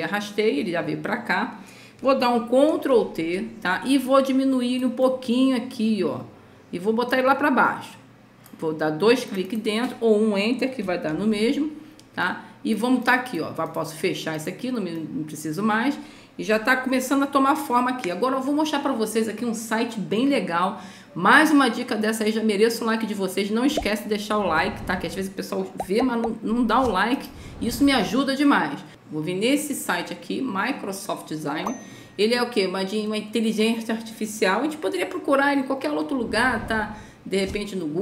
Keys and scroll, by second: 3.2 ctrl+t, 11.4 ctrl+0.